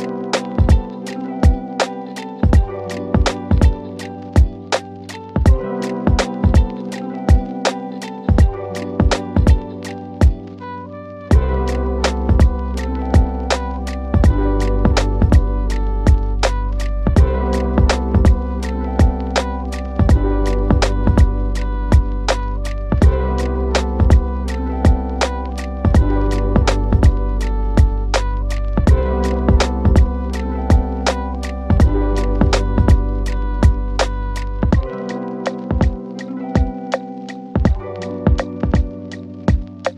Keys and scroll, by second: 1.1 Delete, 2.0 F4, 29.0 w, 30.5 shift+F2, 31.8 F4, 35.7 shift+F2, 36.0 Escape.